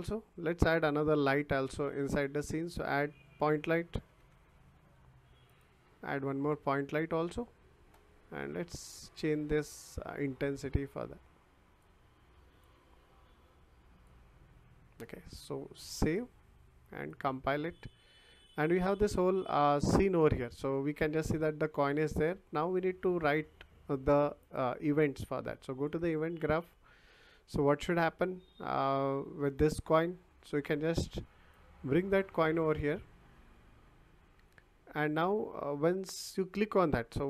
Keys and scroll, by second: 3.7-4.7 typing.